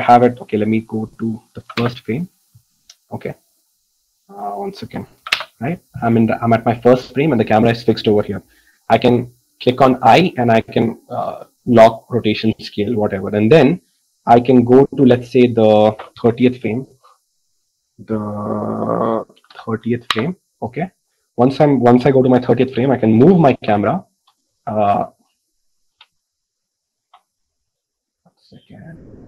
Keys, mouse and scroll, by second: 2.7 Return, 2.7 KP_1, 16.7 click, 17.9-20.9 drag, 24.1 g.